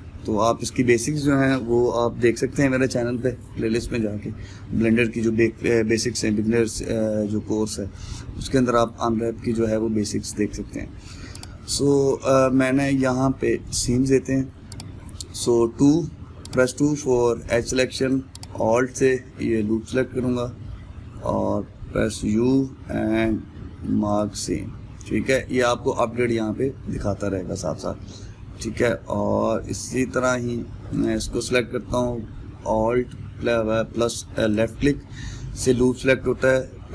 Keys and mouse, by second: 0.3-16.2 shift+middle drag, 16.2 2, 16.9-18.1 middle drag, 18.1 click, 19.3-25.1 middle drag, 25.1 u, 27.2-31.6 middle drag, 31.6 click, 36.0-36.9 middle drag.